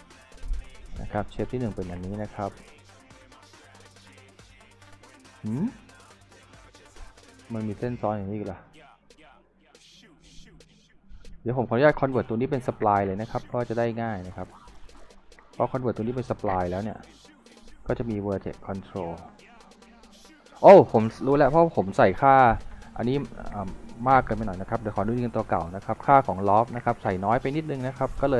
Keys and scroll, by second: 7.0 w, 16.5 Delete, 19.9 F4, 22.3 z, 24.9 Delete.